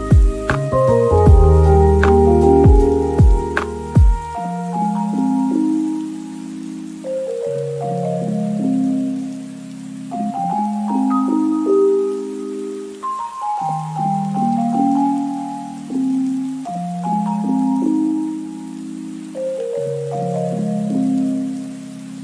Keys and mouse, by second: 1.4 shift+Tab, 1.4 shift+middle click, 1.6-5.3 typing, 1.8 middle click, 2.2 shift+click, 2.8 KP_Divide, 2.9 ctrl+s, 3.0 shift+click, 3.4 click, 4.0 right click, 4.6 click, 5.5-6.7 drag, 7.0 middle click, 7.1 shift+a, 7.7 g, 7.7 y, 7.7 click, 8.5 p, 8.7 Tab, 9.5 middle click, 10.4 ctrl+z, 10.8 Tab, 11.0 l, 11.4 Tab, 11.4 p, 12.3 click, 12.5 shift+middle click, 13.1 click, 13.2 right drag, 13.4 middle click, 13.8-16.3 typing, 14.2 middle click, 15.5 Tab, 16.1 shift+right click, 16.6 click, 16.8 middle click, 17.4 middle click, 18.5 KP_3, 18.8 ctrl+r, 19.4 Tab, 19.5 middle click, 19.9-22.1 typing, 20.5 click, 20.7 Tab, 20.8 click, 21.0 Tab, 21.2 Tab, 21.3 ctrl+r, 21.7 ctrl+r.